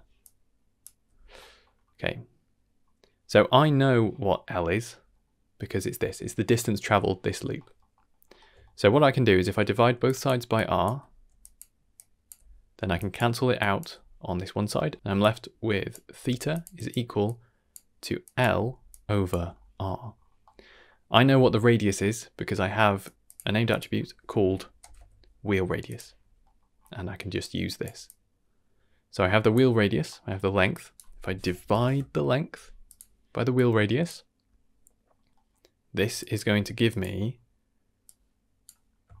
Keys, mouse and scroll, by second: 0.2-0.8 drag, 0.8 d, 0.9 d, 1.3 middle click, 2.8-3.2 scroll down 1, 3.3 middle click, 3.5 scroll down 1, 3.7 middle click, 4.1 middle click, 4.9 middle click, 7.5 middle click, 7.9 middle click, 8.2 scroll up 2, 8.6 shift+middle click, 9.0-9.9 scroll up 2, 9.9-13.8 typing, 10.0 click, 10.5 click, 11.4 click, 11.9 click, 12.9 click, 13.5 drag, 14.7 shift+middle click, 14.9 right click, 14.9-19.3 typing, 15.2-15.9 drag, 16.5 click, 16.7 click, 17.2-17.7 drag, 18.2 click, 18.9-19.3 drag, 20.1 scroll down 2, 20.4 middle click, 20.9 middle click, 22.5 middle click, 23.0 click, 23.1 shift+d, 23.2 click, 23.7-25.9 drag, 24.9 e, 26.4 middle click, 26.7-27.4 scroll up 2, 27.4 click, 28.0-29.5 drag, 30.0 middle click, 30.7-32.9 drag, 33.5-34.0 drag, 35.1 scroll down 1, 35.3 middle click, 35.8-36.2 scroll down 1, 36.2 drag, 36.5 g, 37.1-37.9 scroll down 1, 38.0-38.6 drag, 39.1-39.2 shift+scroll down 3.